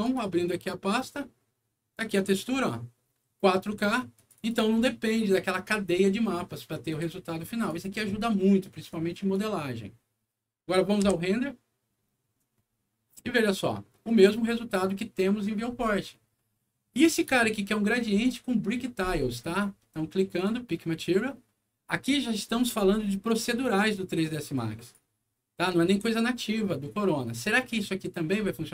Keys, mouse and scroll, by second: 0.0 click, 1.9 click, 4.1 click, 4.3 click, 6.8 click, 7.5 click, 8.8 click, 10.5 middle click, 11.0 F9, 16.3 middle click, 17.2 click, 20.3 click, 21.8 middle click, 22.4-22.9 scroll up 4, 23.2 click, 23.4 click, 24.5 click, 25.2-25.8 scroll down 2, 26.5 middle click.